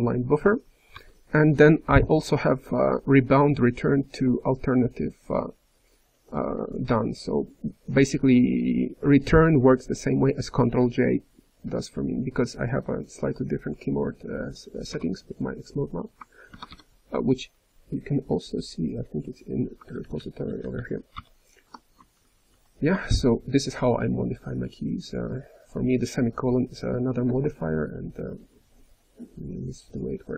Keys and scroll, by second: 9.9-10.6 typing, 16.6-17.3 typing, 19.8 ctrl+n, 20.9-21.6 typing.